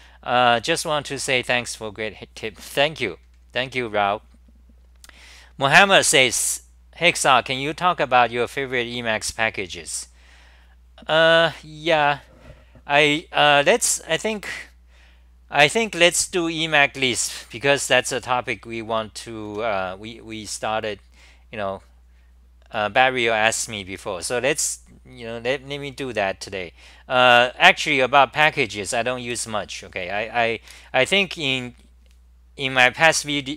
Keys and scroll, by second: 19.5 t.